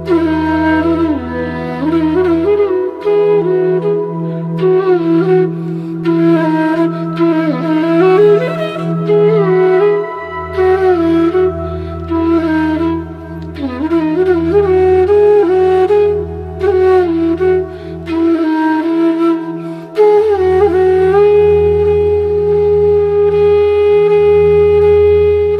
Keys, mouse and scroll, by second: 0.2 alt+scroll up 1, 0.9 click, 5.8 space, 6.0 click, 6.9 click, 10.4 click, 11.2 ctrl+Return, 13.3 click, 13.7 right click, 15.2 click, 16.9 click, 17.6 alt+scroll down 3, 18.9 click, 19.2 alt+scroll down 1, 19.5-21.2 drag, 21.2 ctrl+shift+[, 22.1 alt+scroll down 1, 22.7-23.0 alt+scroll up 1, 23.9 space, 24.1 click, 24.2 space, 24.7-25.5 drag.